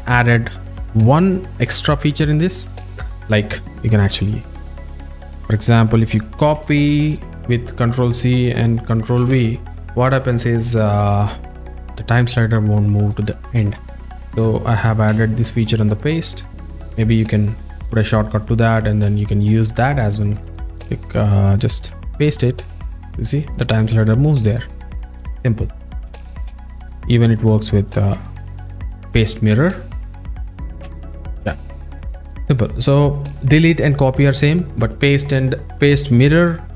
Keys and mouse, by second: 3.9 click, 4.7 drag, 5.8 drag, 7.1 ctrl+c, 7.9-8.9 drag, 9.2 ctrl+v, 11.8 click, 14.4 z, 15.2 z, 26.1 z, 26.5 z, 27.8 click, 30.3 click, 30.9 z, 31.5 z, 32.4 click, 32.4 z.